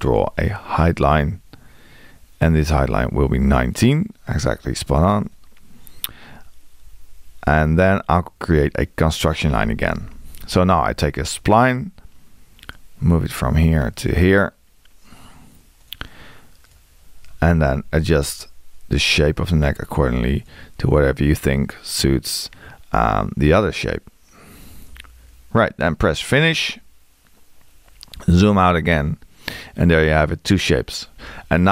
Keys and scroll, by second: 0.0 l, 6.8 Escape, 9.6 x, 18.0 Escape.